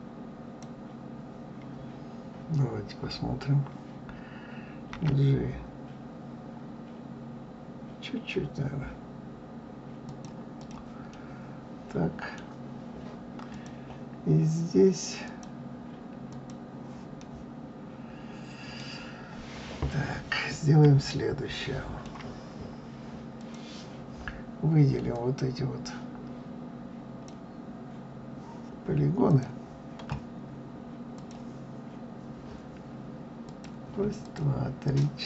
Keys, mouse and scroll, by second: 4.9 g, 10.5 click, 11.1-13.5 middle drag, 13.5 click, 15.2-17.2 drag, 17.2-20.1 middle drag, 20.1-21.1 scroll up 2, 21.1-23.3 shift+middle drag, 23.3 click, 25.1-28.1 drag, 29.2 click, 31.1 click, 33.4 click, 34.2 shift+click, 34.8 shift+click.